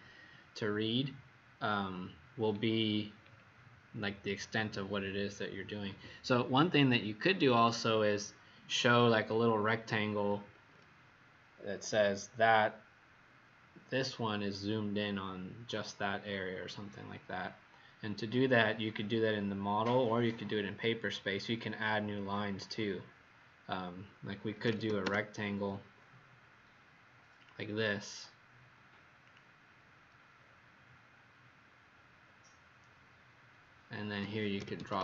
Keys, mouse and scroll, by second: 2.8-3.7 scroll down 4, 22.5 click, 24.2-25.3 typing, 27.4 click, 30.4-31.0 scroll up 2, 31.6-32.2 scroll up 1, 32.2 scroll down 1, 34.3-35.0 typing.